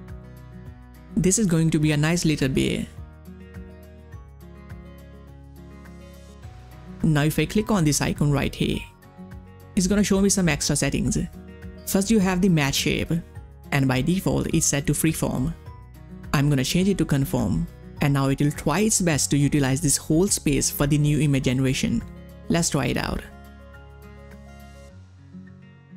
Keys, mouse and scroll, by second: 5.4 click, 5.4-6.5 typing, 8.6 click, 16.8 click, 16.8 click, 19.8 click, 19.8-21.6 scroll down 1, 23.3 click, 24.5-24.9 ctrl+scroll down 1, 24.9 ctrl+space, 25.1 click, 25.4 space.